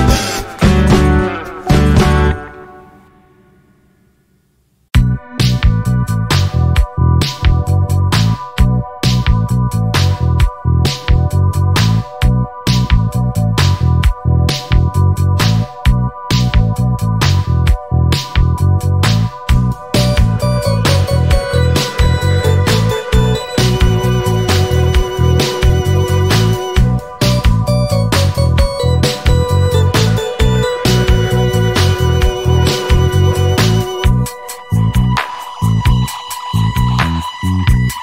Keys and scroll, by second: 0.3 shift+d, 4.7-6.1 typing, 8.1 shift+d, 11.5 s, 16.0 shift+d, 17.1 shift+d, 18.4 shift+d, 19.5 shift+d, 32.9 l, 37.1 g.